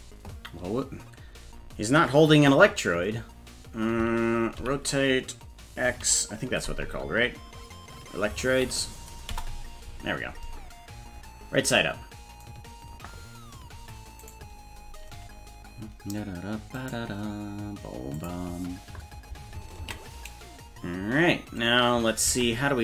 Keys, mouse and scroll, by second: 14.3 right click, 16.8-18.2 right drag, 18.2 click, 20.0 ctrl+s, 22.3 ctrl+Tab.